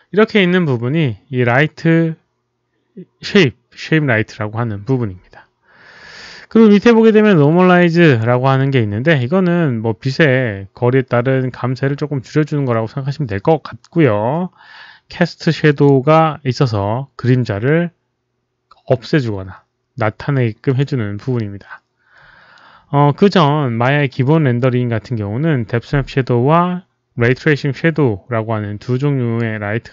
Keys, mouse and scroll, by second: 0.2 click, 0.2 click, 7.6 click, 9.0 click, 15.8 click, 16.8 click, 20.7 click, 26.5 click.